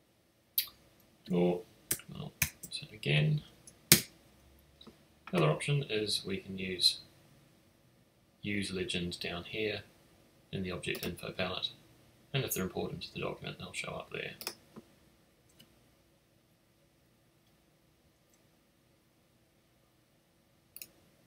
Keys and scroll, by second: 2.4 alt+shift+super+s, 4.0 Return.